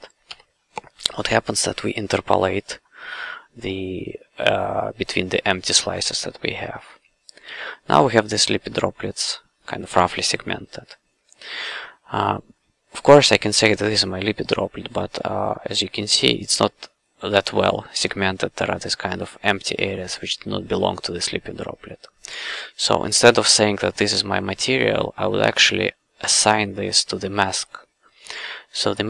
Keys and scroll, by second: 0.3 i, 7.5 q.